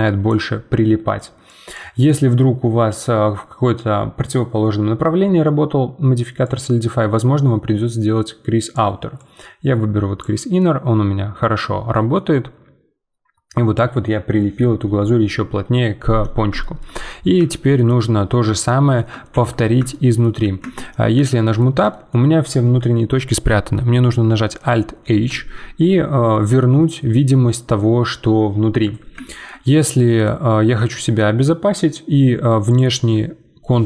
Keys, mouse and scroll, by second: 0.0 right click, 0.3 d, 0.3 d, 1.4-4.5 drag, 6.4-10.6 drag, 10.6-11.6 middle drag, 11.6-12.1 scroll down 2, 12.1-15.3 middle drag, 16.2-16.6 scroll down 2, 16.6-20.6 shift+middle drag, 20.6 Tab, 21.1-24.9 middle drag, 25.1 alt+h, 29.2-32.7 shift+middle drag, 32.7-33.8 alt+drag.